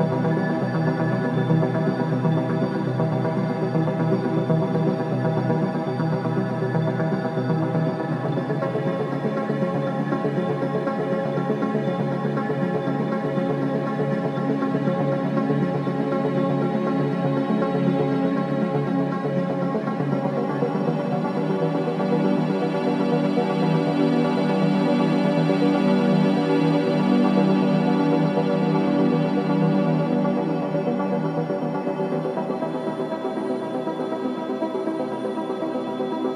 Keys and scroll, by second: 2.3 ctrl+z, 3.4 ctrl+z, 4.7 ], 5.6 4, 14.5 3, 15.2 ], 17.9 4, 22.5 Delete.